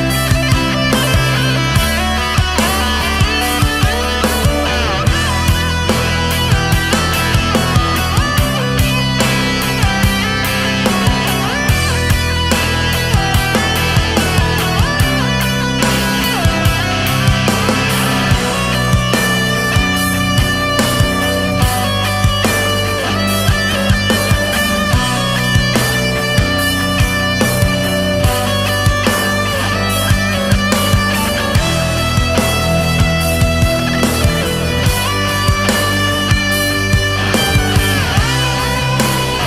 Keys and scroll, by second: 0.6 ctrl+z, 6.5 ctrl+z, 9.6 ctrl+z, 12.0 ctrl+z, 12.3 ctrl+z, 12.8 ctrl+z, 13.2 space, 14.3 ctrl+z, 15.4 ctrl+z, 18.7 ctrl+z, 20.3 ctrl+z, 22.2 ctrl+z, 22.7 ctrl+z, 25.9 ctrl+z, 26.3 ctrl+z, 27.9 space, 29.6 ctrl+z, 30.2 ctrl+z, 34.8 space, 35.6 ctrl+z, 35.8 ctrl+z, 36.9 space, 39.0 ctrl+z.